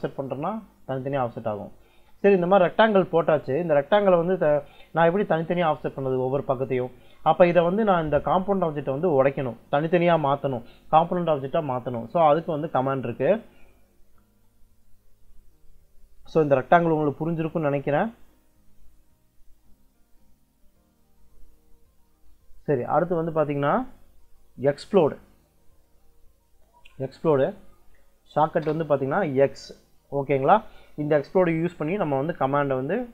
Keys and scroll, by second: 2.8 `, 3.0 Escape, 8.6 Escape, 28.2 -, 28.5 space.